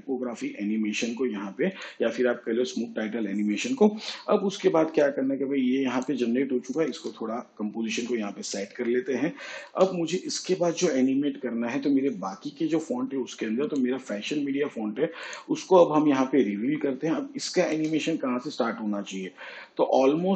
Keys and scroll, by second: 8.3 shift+/.